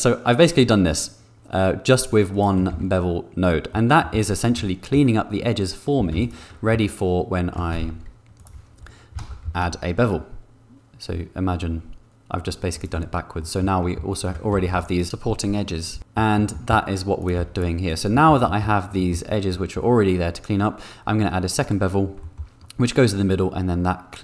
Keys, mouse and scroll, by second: 3.0 Tab, 3.7 click, 4.4 Tab, 4.5 click, 5.9 2, 7.7 shift+g, 9.4 ctrl+b, 12.9 shift+click, 14.5 g, 14.6 g, 15.0 g, 16.0 middle click, 16.3 middle click, 16.9 Tab, 17.3 x, 18.1 middle click, 18.4 shift+middle click, 18.9 middle click, 19.5 middle click, 21.6 click, 22.2 shift+click.